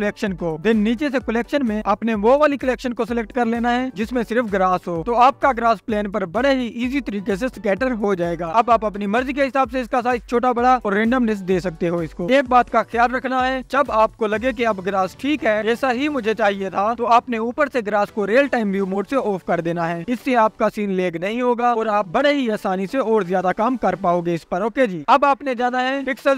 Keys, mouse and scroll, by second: 1.3-3.6 scroll up 2, 1.6-8.8 drag, 6.2 KP_0, 7.7 scroll down 1, 9.6-10.1 scroll up 2, 11.7 scroll up 2, 12.3-16.8 drag, 18.4 KP_0, 22.3 scroll down 2, 22.9-24.2 drag, 24.2 scroll down 2, 24.8 scroll down 2, 24.8 click, 25.5-25.9 scroll down 4.